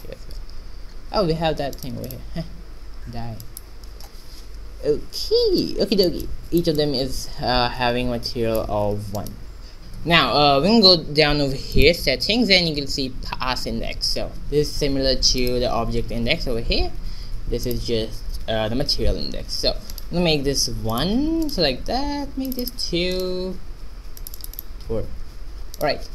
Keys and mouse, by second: 2.0 2, 2.6 x, 3.2 alt+1, 3.7 click, 5.5 shift+z, 9.1 middle click, 9.7 shift+z, 9.8-11.1 right drag, 12.4-16.3 drag, 20.6-26.1 right drag, 21.5-25.2 drag.